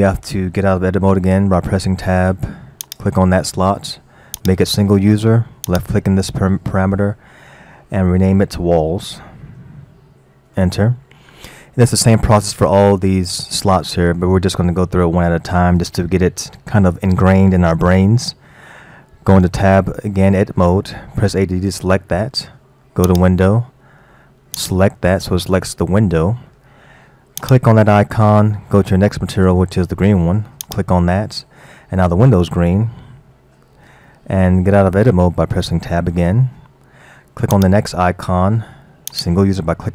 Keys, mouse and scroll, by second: 1.4 Tab, 2.8 click, 4.4 click, 5.7 click, 9.5 l, 19.5 Tab, 21.3 a, 23.1 click, 24.6-25.2 drag, 27.5-30.5 drag, 35.6 Tab, 37.6 click, 39.1 click.